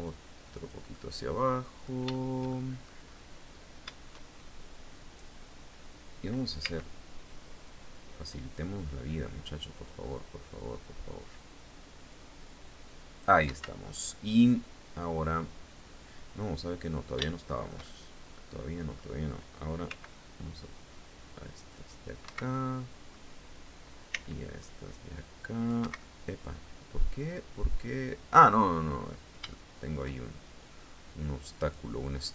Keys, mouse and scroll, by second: 0.5-1.5 middle drag, 1.7 shift+middle click, 2.5-2.9 shift+scroll up 2, 4.5 right click, 6.1 c, 7.2-13.0 drag, 13.0 Escape, 13.3 scroll down 1, 13.7-16.8 middle drag, 16.9-18.7 shift+middle drag, 19.4 c, 20.3-21.4 drag, 21.7 Escape, 22.1 middle click, 23.7 c, 24.2-25.5 drag, 25.4 Escape, 25.5-28.2 middle drag, 28.5 scroll down 1, 29.1 shift+middle click, 30.8 click, 31.7-32.3 drag.